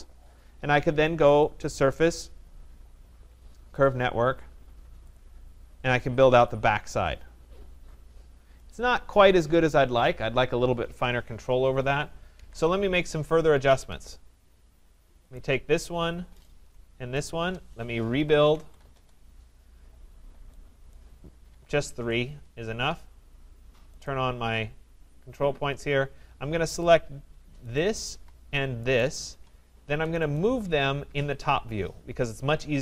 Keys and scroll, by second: 12.3 ctrl+z, 13.6 Escape, 18.9 Return.